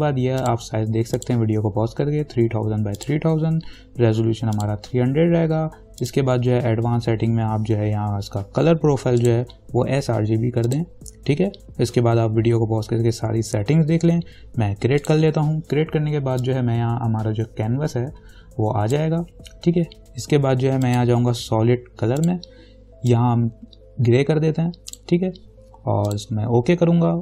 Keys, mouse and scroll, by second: 0.6 click, 7.0-9.0 scroll down 1, 9.4 click, 15.2-26.3 drag.